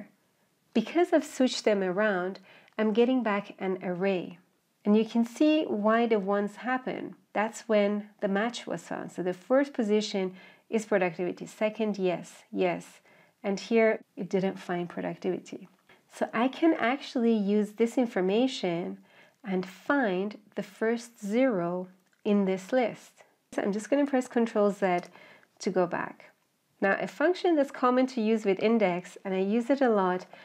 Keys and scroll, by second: 24.5 ctrl+z.